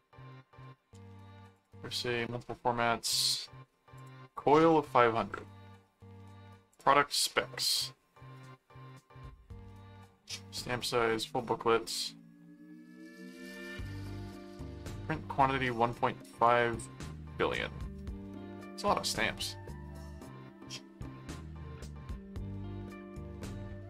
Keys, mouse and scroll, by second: 1.5 click, 3.9 click, 6.7 click.